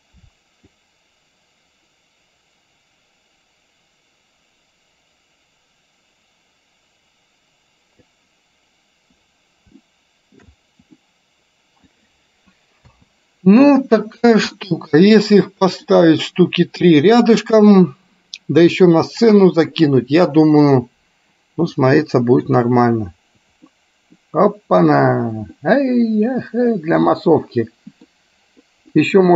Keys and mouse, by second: 0.9-8.2 drag, 9.9 shift+middle click, 11.1 middle click, 13.0 space, 14.9-16.2 middle drag, 22.1 middle click, 24.0 middle click, 25.9-28.2 middle drag, 29.1 middle click.